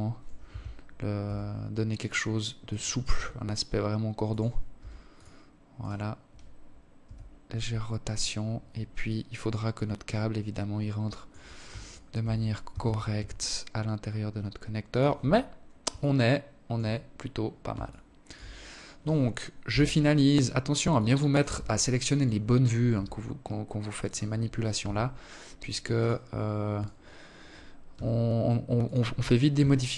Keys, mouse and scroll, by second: 1.2 right click, 1.6 r, 3.2 s, 4.3 right click, 5.6 r, 7.6 alt+click, 8.2 alt+click, 10.4 shift+right click, 11.2 g, 13.7 scroll down 3, 14.6 alt+click, 15.5 scroll down 2, 16.4 alt+shift+click, 18.2 KP_7, 19.4 alt+shift+click, 20.6 right click, 21.4 s, 23.4 g, 25.3 right click, 26.4 s, 28.0 g, 29.2 alt+click.